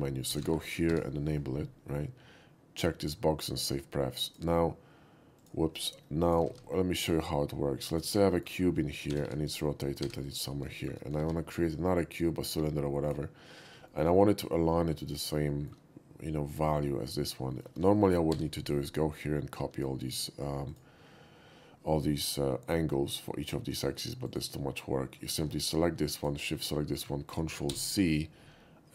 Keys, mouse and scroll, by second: 0.4 c, 0.5 o, 0.7 p, 0.9 y, 4.3 click, 5.4 click, 6.3 click, 6.5 shift+a, 7.9 click, 8.3 shift+middle drag, 9.1 r, 9.4 r, 9.5 click, 10.0 g, 10.2 click, 10.8 shift+middle click, 11.2 shift+a, 13.0 shift+click, 13.9 shift+middle click, 14.2 shift+middle drag, 15.5 shift+middle drag, 17.5 shift+middle click, 18.3 n, 20.7 click, 23.5 middle click, 24.3 click, 25.3 shift+middle click, 25.6 shift+click, 26.2 shift+click, 27.7 ctrl+c.